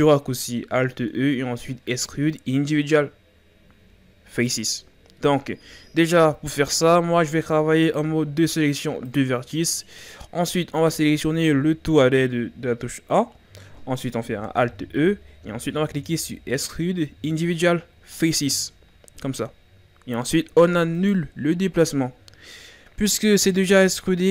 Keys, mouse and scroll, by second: 7.9 ctrl+Tab, 10.8 a, 11.2 a, 14.6 alt+e, 22.4 scroll up 1, 23.5-24.3 ctrl+scroll up 1.